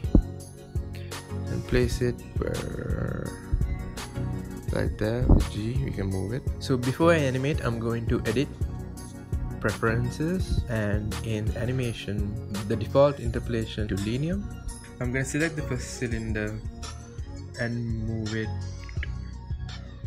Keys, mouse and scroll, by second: 0.3 g, 4.7 shift+click, 5.3-7.3 drag, 9.0-11.0 drag, 16.1-19.0 shift+middle drag, 19.0 click.